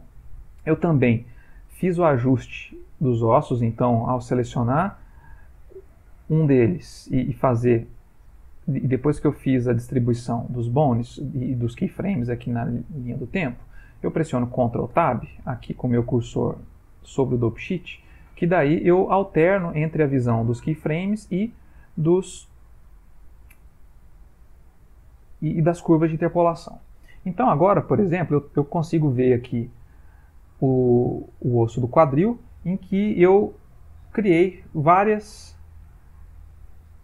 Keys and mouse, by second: 3.4 click, 10.3 middle click, 11.9 middle click, 15.0 ctrl+Tab, 16.8 ctrl+Tab, 17.6 ctrl+Tab, 29.6 click, 33.1 click, 35.5 Home.